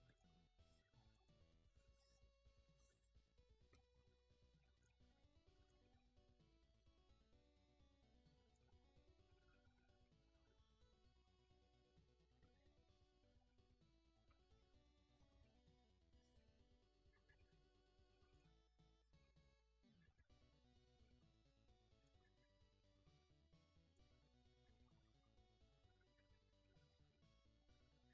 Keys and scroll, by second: 14.1-15.8 ctrl+z.